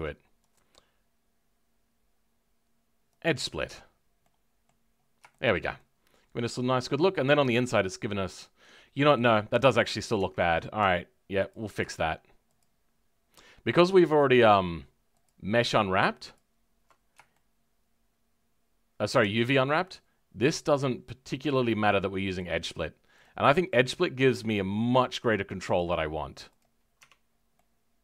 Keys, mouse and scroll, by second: 3.2 right click, 3.6 Tab, 3.8-4.2 scroll down 4, 4.2 middle click, 5.3-7.9 shift+middle drag, 7.9-8.2 scroll up 2, 8.2-10.1 middle drag, 10.1 Tab, 11.5 alt+Left, 14.3 alt+shift+Left, 17.3-20.5 shift+middle drag, 20.5 alt+shift+click, 21.4 alt+shift+click, 23.7-26.5 shift+middle drag, 26.5 right click, 26.9 Tab, 27.2 scroll down 2, 27.5-28.0 middle drag.